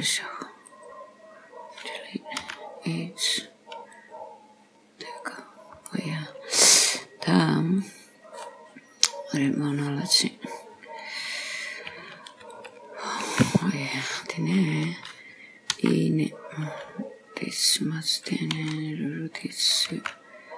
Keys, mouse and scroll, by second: 2.5 x, 5.3 click, 5.9 scroll up 1, 6.0 middle click, 7.1-7.9 scroll down 2, 7.9 click, 9.5 click, 12.6 alt+shift+click, 13.6-14.3 scroll down 6, 15.8 e, 19.5 s, 20.0 g.